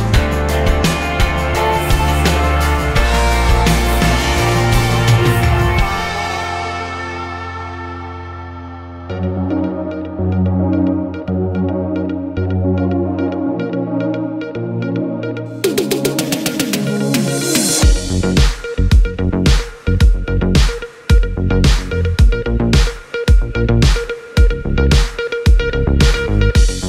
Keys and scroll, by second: 5.3 5, 5.6 Return.